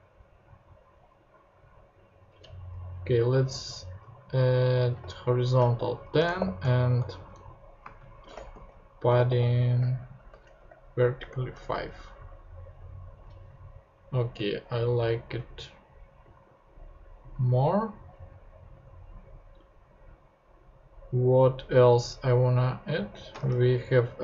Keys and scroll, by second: 4.3 Left, 5.0 shift+Left, 5.7 shift+h, 6.2 BackSpace, 6.4 shift+h, 7.0 shift+Right, 7.8-11.2 typing, 11.7 super+Tab, 23.0 super+x, 23.4 super+Tab.